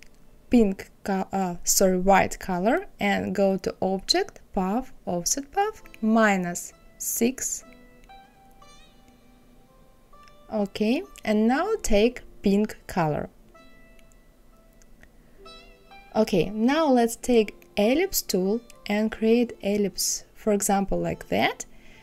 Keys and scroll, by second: 6.1 KP_Subtract, 6.9 KP_6.